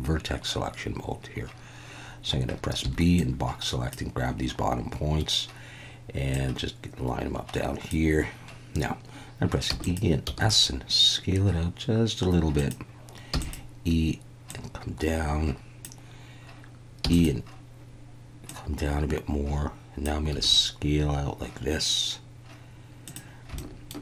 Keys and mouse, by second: 2.8 b, 6.4 click, 9.7 e, 10.3 s, 12.6 click, 13.4 click, 13.4 e, 14.6 click, 17.0 e, 17.1 click, 18.5 click, 20.3 s, 23.1 click, 23.6 shift+middle click.